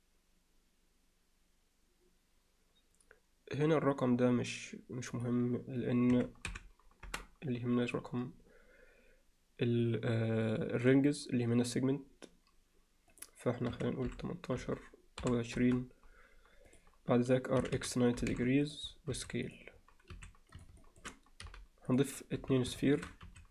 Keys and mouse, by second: 5.1-7.6 drag, 13.1-16.4 drag, 16.7 click, 17.6 r, 19.1 s, 20.1 s, 20.8 alt+shift+middle click, 21.5 g, 22.4 z, 22.8 shift+middle click, 23.3 s.